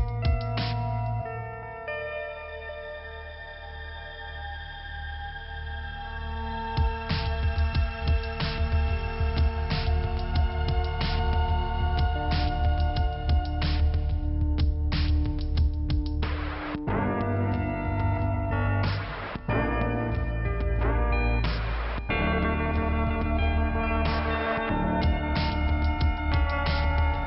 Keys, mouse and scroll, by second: 0.8 click, 0.8 click, 1.4 click, 3.2 click, 4.0 click, 4.1 click, 4.5 click, 5.7-6.2 scroll up 1, 6.2 click, 6.5 click, 8.1 click, 8.1 click, 8.4 click, 8.5 double click, 9.0 double click, 10.6 click, 10.7 click, 10.8 click, 11.5 click, 12.1 scroll down 1, 12.8 click, 13.5 click, 19.8 scroll up 1, 20.0 click, 20.2 click, 21.7 click, 22.8 click, 25.3 click, 26.6 click.